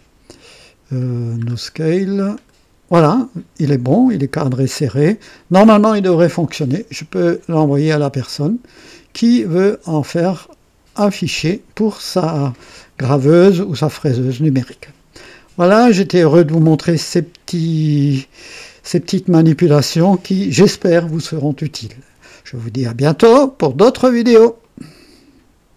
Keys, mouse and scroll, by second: 1.1-1.5 scroll down 2, 1.5 scroll up 2, 2.4 click, 15.8 scroll down 2, 24.6 right click, 25.7 click.